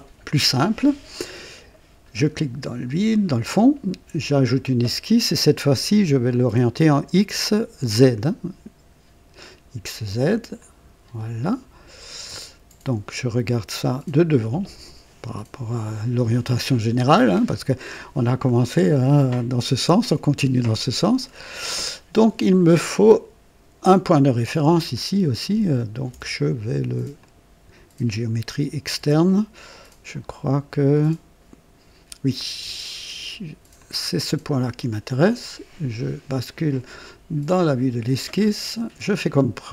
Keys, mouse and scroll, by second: 2.3 click, 4.3 click, 10.6 click, 12.2 click, 17.4 scroll up 2, 20.8-22.9 right drag, 24.9-26.2 ctrl+alt+drag, 27.2 click, 33.7 click, 37.5 click.